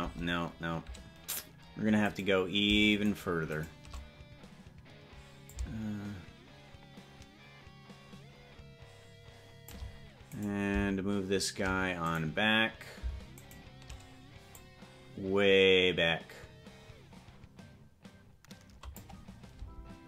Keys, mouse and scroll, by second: 0.2 KP_0, 2.4 right click, 3.4 shift+right click, 3.8 right click, 5.6-9.9 shift+drag, 10.6 right click, 12.4 right click, 13.6 shift+right click, 13.8 shift+right click, 14.6-19.2 drag, 19.8 space.